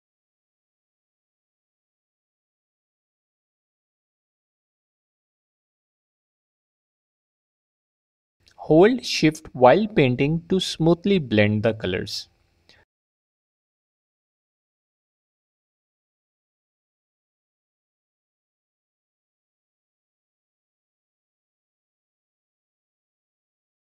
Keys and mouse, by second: 0.8 click, 1.5 f, 1.7 click, 2.7 ctrl+z, 2.9 click, 4.2 f, 4.3 click, 6.2 middle click, 7.0 middle click, 7.2 f, 8.9 middle click, 9.4 f, 9.6 shift+click, 12.0 shift+click, 14.1 f, 14.4 click, 17.9 f, 18.0 click, 20.5 click, 21.6 f, 21.7 click.